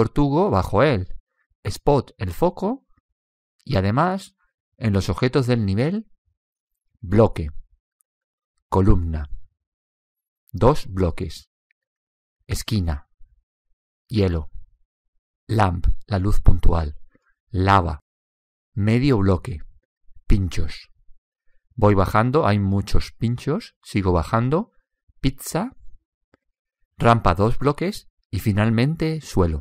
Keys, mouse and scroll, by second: 0.4 click, 2.5-5.9 drag, 7.4-10.7 drag, 10.9 click, 12.9-24.4 drag, 27.9-29.6 drag.